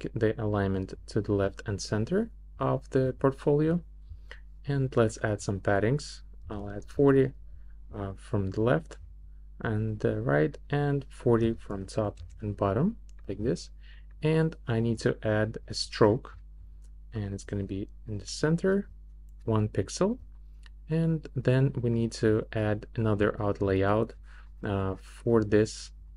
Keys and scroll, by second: 6.2-7.1 typing, 11.2-12.2 typing.